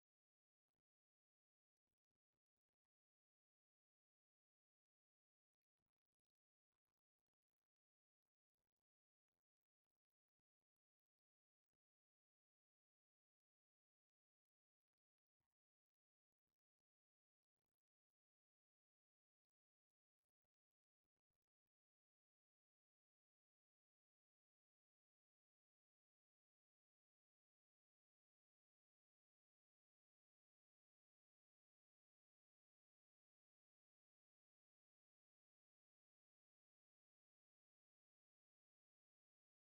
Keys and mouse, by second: 0.7 g, 2.1 Tab, 3.7 Tab, 4.6 alt+g, 10.5-14.8 drag, 14.9-17.5 drag, 19.8-22.6 drag, 23.6 KP_Decimal, 23.8 KP_0, 24.1 KP_Enter, 24.1 KP_9, 26.4-28.4 drag, 32.2-35.1 drag, 35.5-39.6 drag.